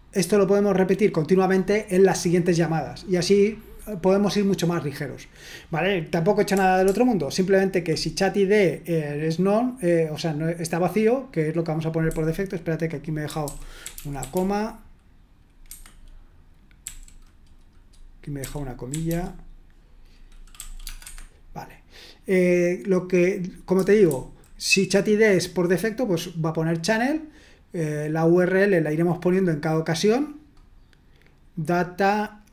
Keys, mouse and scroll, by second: 6.5-7.8 typing, 12.0-14.8 typing, 15.6 Escape, 16.8 f, 18.6-20.8 typing, 21.0 Escape, 23.7-24.0 typing.